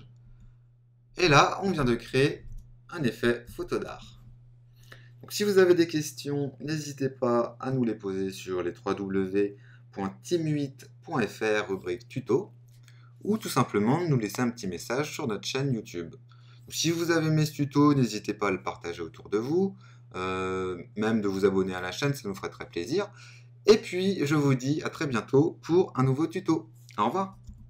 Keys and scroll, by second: 1.7 super+-, 2.4 super++, 3.4 super+-.